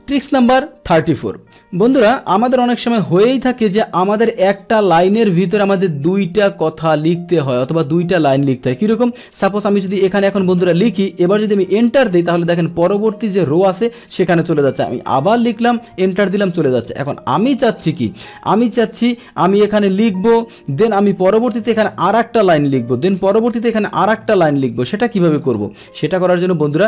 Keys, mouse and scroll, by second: 3.0 click, 4.5 click, 6.7 click.